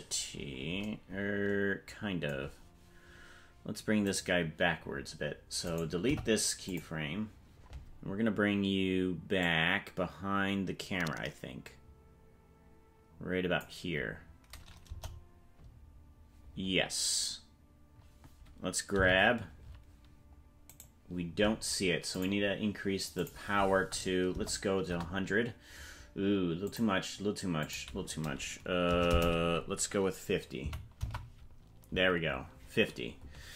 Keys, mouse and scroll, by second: 0.9 scroll down 1, 4.2 right click, 5.6 right click, 6.0 Delete, 9.4-13.8 drag, 14.9 KP_0, 18.9 g, 22.1-26.0 drag, 26.6-32.5 drag, 29.1 BackSpace.